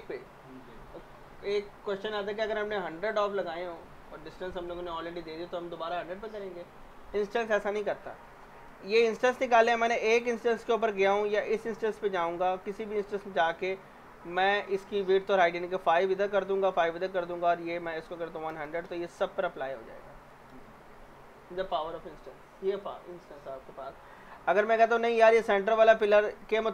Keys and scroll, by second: 15.7 5, 16.1 Tab, 16.6 5, 17.0 Tab, 18.0-19.1 typing.